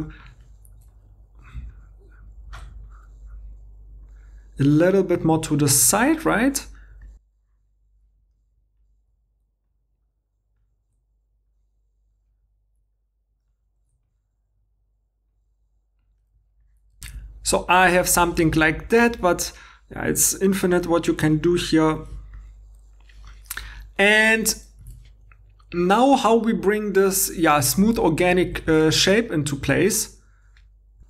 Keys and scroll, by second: 2.5 g, 7.8-10.6 typing, 10.3 super+z, 11.8 g, 13.1-16.4 typing, 16.8 alt+Tab, 17.0 alt+Tab, 18.3 1, 19.1 g, 20.7 2, 24.8 alt+Tab, 28.7 alt+Tab.